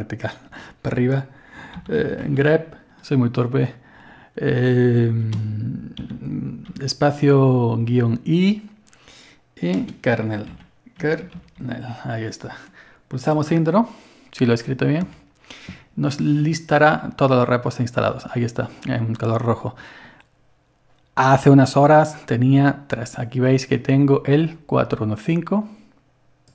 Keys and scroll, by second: 1.5-2.9 typing, 6.0-6.7 typing, 9.9-12.1 typing, 15.0 Return, 16.2 typing.